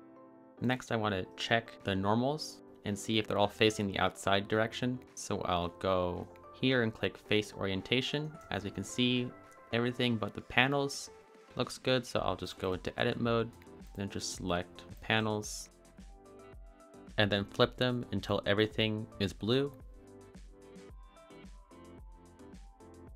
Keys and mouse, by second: 1.1 click, 6.2-8.0 drag, 9.0 shift+middle drag, 10.0-10.7 middle drag, 13.2 click, 13.9 middle click, 14.5 shift+middle click, 14.8 middle click, 15.7 middle click, 17.2-18.4 drag, 19.1 a, 20.2 middle click, 20.6 click, 21.0 middle click, 21.5 middle click, 23.0 middle click.